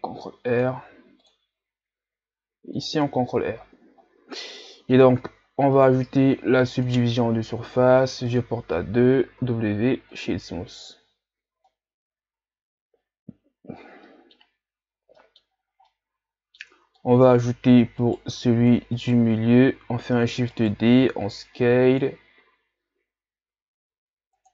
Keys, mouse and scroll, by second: 0.9 ctrl+r, 3.1 Tab, 4.7-5.8 middle drag, 5.8-9.4 drag, 9.4 w, 11.7-14.7 middle drag, 14.8 ctrl+scroll down 1, 15.2 middle click, 15.5 scroll up 2, 15.9-16.7 middle drag, 16.7 Tab, 17.0-18.0 middle drag, 18.0 alt+right click, 19.0 alt+right click, 20.1 shift+d, 21.0 s.